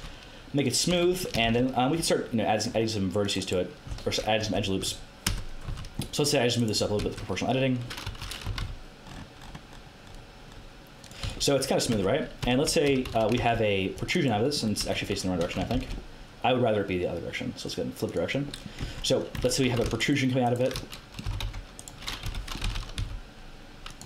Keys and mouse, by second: 0.9 a, 1.4 ctrl+r, 4.4 KP_1, 4.8 KP_3, 5.2 KP_1, 5.6 a, 5.9-7.7 right drag, 7.0 KP_1, 8.2 o, 8.4 g, 11.2 z, 11.9 Tab, 12.4 Tab, 12.8 z, 13.0 a, 13.3 ctrl+r, 14.8 a, 15.4 a, 15.7 ctrl+n, 18.0 click, 18.8 Tab, 19.3 Tab, 19.6 a, 21.2 click, 21.2 g, 22.2 o, 22.6 g.